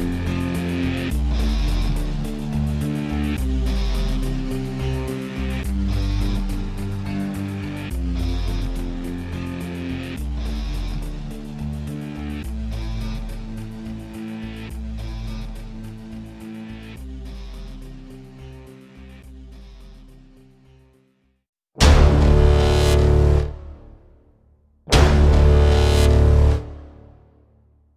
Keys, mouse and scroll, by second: 0.2 middle click, 0.4-1.2 scroll down 10, 1.2 alt+middle click, 1.4 shift+d, 1.8 r, 2.5 r, 3.4 alt+click, 3.7 q, 3.8 alt+middle click, 5.3 alt+click, 5.5 z, 6.2 KP_Decimal, 6.4 alt+click, 6.5 alt+middle click, 6.6-7.5 alt+drag, 7.5 alt+r, 7.9 click, 8.8 scroll down 1, 8.9 alt+click, 9.3 q, 9.5 g, 10.5-11.7 alt+drag, 14.4 click, 14.9 s, 15.6 click, 16.1 click, 17.4 click, 17.5 Delete, 17.8 alt+middle click, 17.9 s, 18.4 click, 18.9 s, 19.3-19.7 drag, 19.7 middle click, 20.3 middle click, 20.8 click, 21.2-21.7 alt+middle drag, 21.7 alt+click, 22.7-23.1 scroll down 3, 22.9 click, 23.1 click, 23.2-25.2 middle drag, 25.2-26.1 alt+right drag, 26.1-27.9 middle drag.